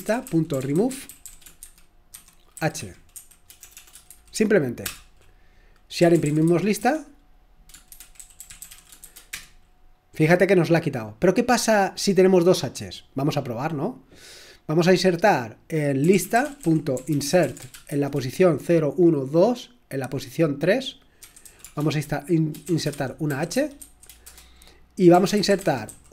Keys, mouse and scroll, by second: 0.0-4.1 typing, 4.8 Return, 5.7-9.5 typing, 15.9-18.4 typing, 21.0-26.1 typing.